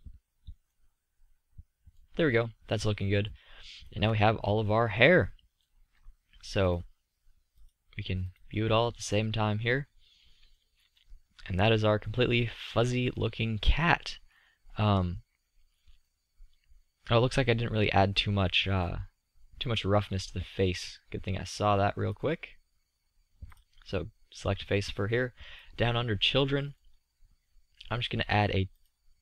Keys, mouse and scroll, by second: 2.4-3.1 middle drag, 3.4 middle drag, 5.1-8.1 middle drag, 8.1-12.5 drag, 21.3-24.7 middle drag, 27.6-29.2 middle drag.